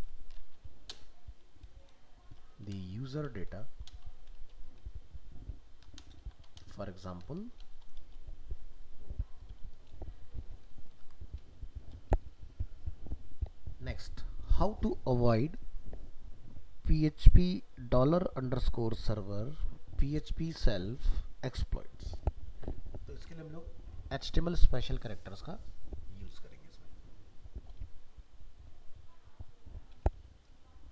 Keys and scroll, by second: 11.0 ctrl+s.